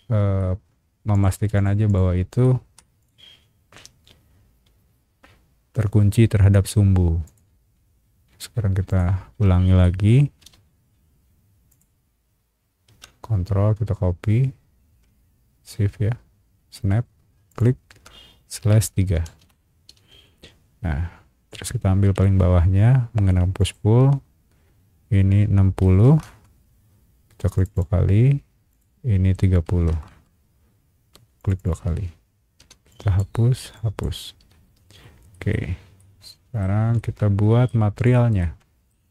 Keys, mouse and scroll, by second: 0.4 scroll up 1, 1.1 shift+click, 1.5 shift+click, 1.8 shift+click, 2.4 shift+middle click, 3.0 shift+click, 7.2 click, 8.9 shift+click, 9.8 shift+middle click, 10.4 m, 11.7 click, 17.5 shift+click, 18.6 /, 19.4 Return, 19.9 space, 22.0 p, 23.6 click, 23.9 middle click, 24.1 scroll down 1, 25.8 KP_6, 26.2 KP_0, 26.2 KP_Enter, 27.5 click, 27.7 click, 28.7 click, 29.7 KP_3, 30.1 KP_0, 30.1 KP_Enter, 31.4 click, 31.5 click, 32.6 e, 32.9 click, 33.7 click, 34.5 space, 34.7-35.2 scroll down 4, 35.3 middle click, 36.0 middle click, 36.9 shift+middle click, 37.9 shift+click, 38.4 shift+middle click.